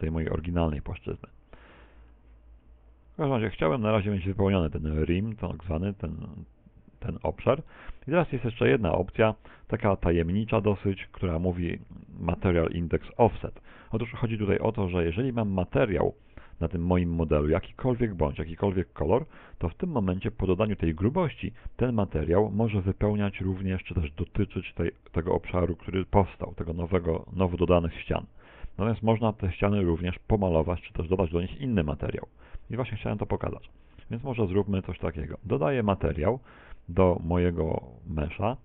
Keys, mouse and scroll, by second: 0.0 middle click, 1.8 middle click, 6.8 click, 7.7 middle click, 8.4 middle click, 9.2 middle click, 10.9 middle click, 17.7 click, 29.0 shift+middle click.